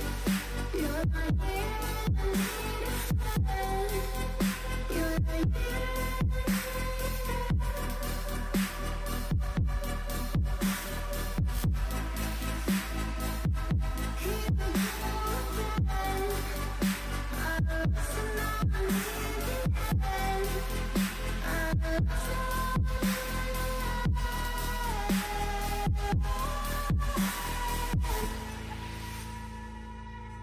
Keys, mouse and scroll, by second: 1.8 s, 5.9 g, 8.0 s, 9.1 shift+middle click, 9.3-10.0 scroll up 3, 10.0 KP_1, 10.6 g, 12.6 shift+middle click, 12.9-13.7 scroll up 7, 13.1 shift+middle drag, 13.7 g, 15.2-15.8 scroll down 9, 15.8 middle click, 16.1 alt+z, 16.3 click, 16.8 click, 16.8 middle click, 17.2 Tab, 17.8 Tab, 18.2 a, 18.4 click, 18.4 shift+middle click, 18.9 scroll up 1, 19.3 alt+s, 21.5-22.9 drag, 21.5 shift+middle click, 23.0 shift+d, 24.9 click, 25.6 Tab, 26.0 click, 26.6 click, 29.3 click, 30.2 Tab.